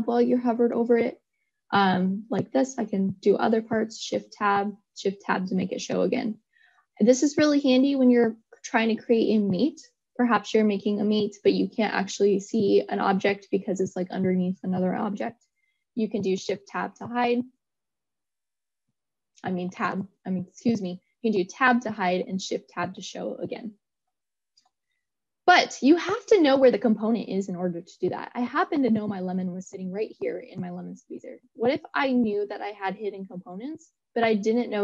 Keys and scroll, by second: 2.9 shift+Tab, 18.4 Tab, 22.7 shift+Tab.